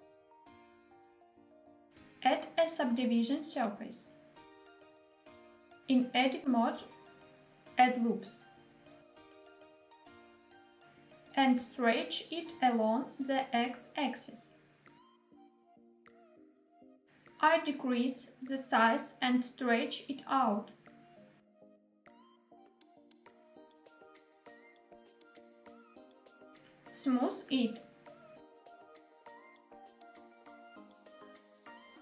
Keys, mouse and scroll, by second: 0.5 click, 2.7 click, 3.7-5.5 drag, 6.2 Tab, 7.4 ctrl+r, 10.4 click, 10.8 s, 11.2 x, 16.1 click, 17.0 middle click, 17.0-17.4 scroll up 1, 17.4 Tab, 20.0 s, 20.8 click, 21.5 s, 23.4 x, 25.9 click, 26.6 right click, 27.4 click, 29.1 click, 30.1 click, 31.2 click.